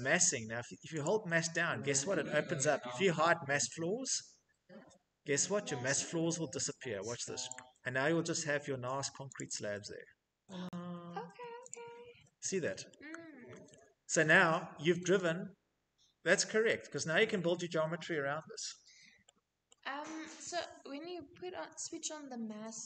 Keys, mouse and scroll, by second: 0.4 click, 6.9 click, 7.7 click, 8.7 click, 10.1 middle click, 10.1 middle click, 11.1 click, 11.1-11.9 scroll, 13.1 middle click, 16.3 click, 17.1 Escape, 17.5 click, 17.5 click, 17.6 click, 19.1 middle click, 19.5 middle click, 19.6 middle click, 20.3 middle click, 22.6 scroll, 22.7 middle click, 22.8 middle click.